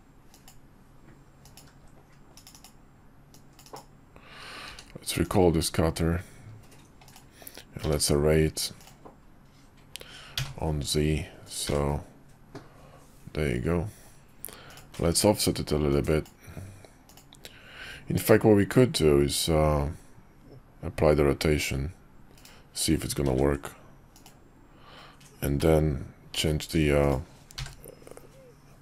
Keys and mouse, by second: 3.6 click, 4.7 q, 7.8 q, 15.1 ctrl+`, 23.3 ctrl+a, 26.3 q.